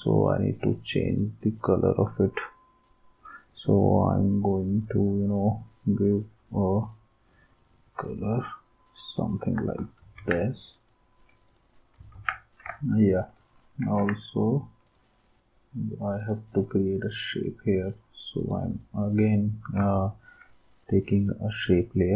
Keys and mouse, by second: 10.1 ctrl+s, 12.2 ctrl+s, 13.8 ctrl+s.